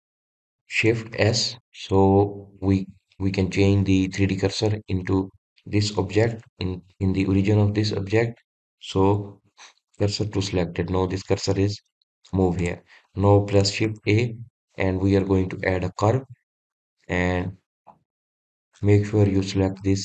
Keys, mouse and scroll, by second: 2.2 shift+s, 13.7 click, 14.9 shift+a.